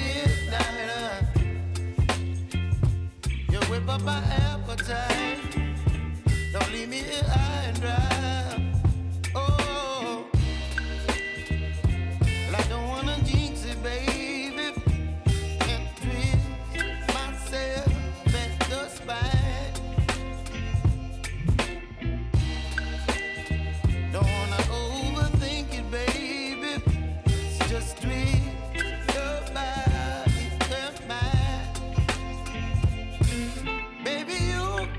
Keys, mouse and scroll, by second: 0.2 p, 1.5 click, 2.4 u, 2.8 space, 4.7 j, 5.3 click, 5.7 scroll down 1, 6.7 click, 9.1-19.0 drag, 19.3 scroll up 1, 20.3-21.6 drag, 21.9 space, 23.7 click, 30.3 space, 31.9 click, 32.9 typing, 33.3 scroll down 1, 34.3 Page_Down.